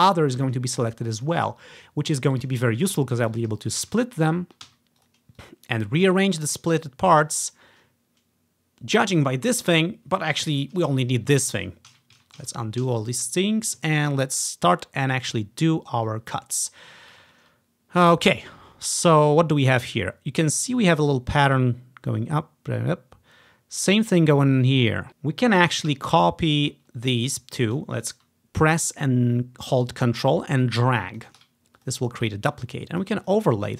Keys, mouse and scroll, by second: 0.5 click, 0.9 click, 1.3 click, 2.6 click, 3.0 ctrl+scroll up 1, 3.1-5.4 ctrl+drag, 3.9-5.9 typing, 5.5 click, 6.2 click, 7.2 click, 8.7-9.4 typing, 12.0 ctrl+z, 12.2 ctrl+z, 12.5 ctrl+z, 12.9 ctrl+z, 14.3-14.9 ctrl+scroll down 1, 14.9-16.0 scroll up 1, 16.2-17.2 drag, 17.4-17.8 scroll down 1, 17.8 scroll up 1, 17.9 ctrl+click, 20.6-22.2 drag, 30.0-31.3 ctrl+drag, 31.9 click, 32.1 click, 32.8 click, 33.3 click, 33.6 click.